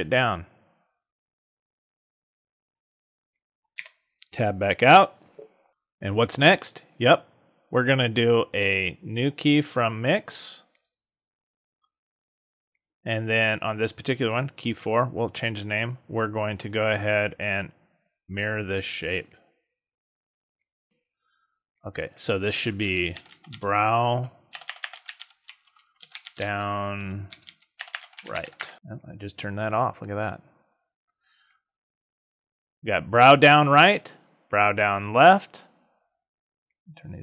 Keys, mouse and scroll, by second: 3.7 Tab, 8.7 click, 10.7 click, 12.8 click, 16.4 click, 19.2 click, 20.5 click, 20.8 click, 21.6 click, 24.6 BackSpace, 24.8 BackSpace, 27.9 BackSpace, 28.7 click, 29.6 click, 31.4 click, 34.4 click, 36.6 click.